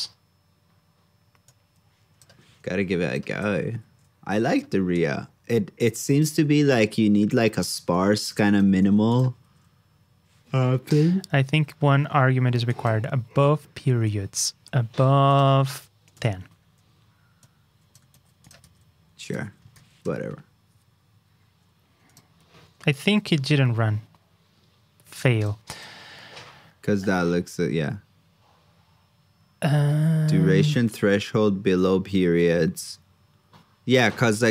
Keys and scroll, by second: 3.6 alt+shift+Down, 6.2 super+v, 8.8 super+c, 9.4 super+v, 10.9 super+Tab, 14.6 super+Tab, 18.1 super+c, 18.6 super+v, 19.2 ctrl+c, 19.7 super+v.